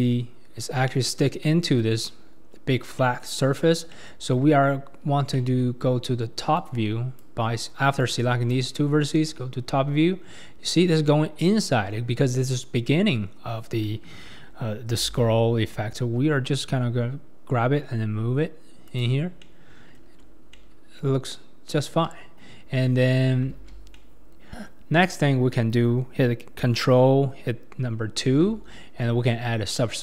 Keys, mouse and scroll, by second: 3.8 scroll up 1, 3.9-6.6 middle drag, 6.6 click, 8.0 click, 9.1 KP_7, 9.9-11.9 scroll up 1, 11.9-13.0 scroll up 2, 15.0 g, 20.2 Tab, 20.5-22.0 middle drag, 22.0 KP_1, 23.5 alt+z, 23.9-25.0 middle drag, 25.0 click, 25.8 click, 25.8-28.3 middle drag, 25.8 right click, 28.3 ctrl+2.